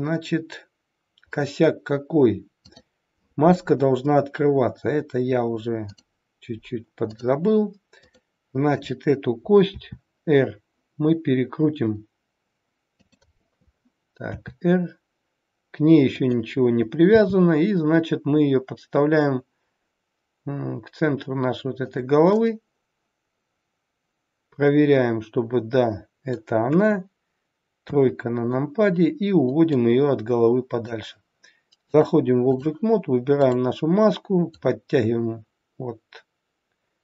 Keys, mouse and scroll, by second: 5.8 click, 7.9 click, 9.8 r, 14.3 r, 17.1 g, 22.3 middle click, 27.8 KP_3, 29.7 click, 31.8 click, 34.4 click.